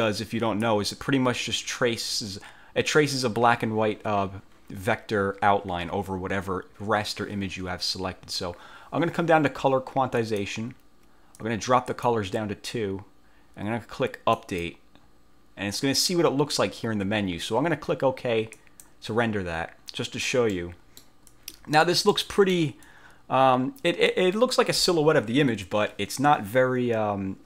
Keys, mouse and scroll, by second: 10.3 click, 11.5 click, 14.5 click, 18.7 click, 20.6 middle click, 21.9 click, 22.2 middle click, 23.0-24.4 drag.